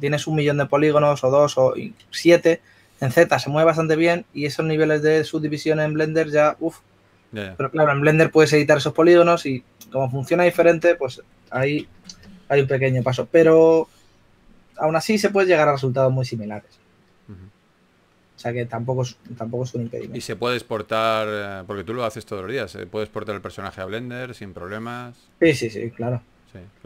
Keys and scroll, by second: 13.8 2, 15.8 typing, 20.1 typing, 23.9 s.